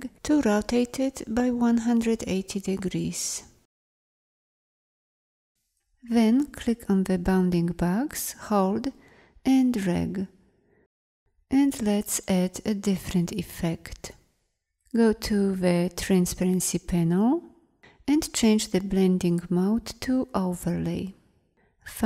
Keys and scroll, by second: 2.9 Down.